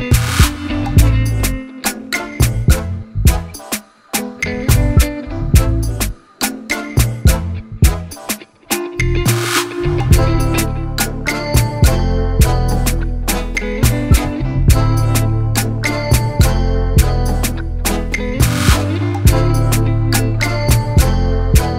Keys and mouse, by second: 0.3 alt+click, 2.2 click, 4.5 click, 6.6 click, 7.0 ctrl+t, 8.3 click, 9.8-13.1 drag, 15.1 Left, 15.3 Left, 16.2 Left, 16.5 Return, 17.4 click, 20.7 ctrl+=.